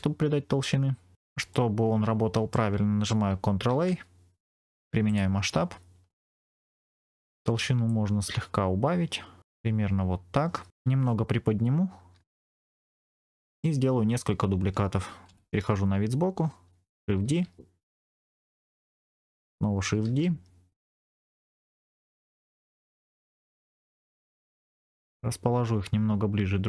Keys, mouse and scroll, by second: 1.4-2.5 middle drag, 3.6 ctrl+a, 6.0 middle click, 6.4-7.0 scroll down 1, 7.0-7.6 scroll down 1, 7.8-9.4 shift+drag, 9.7-10.7 scroll up 1, 10.7 KP_1, 12.4 g, 12.7 click, 13.0 middle click, 15.2 KP_1, 17.2 shift+d, 18.8 click, 19.9 shift+d, 20.8 click, 21.1 middle click, 21.7 scroll down 3, 21.9 middle click, 22.1 click, 22.5-22.9 scroll up 2, 22.7 click, 23.1 KP_1, 24.9 g.